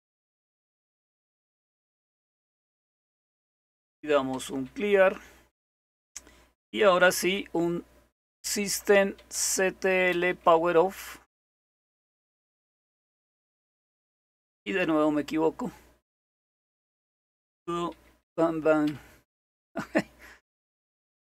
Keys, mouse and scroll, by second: 0.0 click, 1.7 click, 2.9 click, 7.0-12.5 typing, 14.8 typing, 16.5 typing, 17.9-19.3 typing, 20.3-21.0 typing.